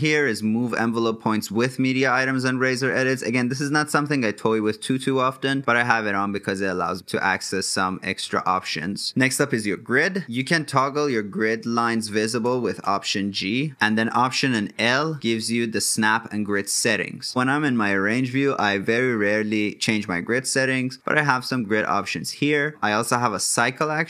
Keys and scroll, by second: 13.7 alt+l.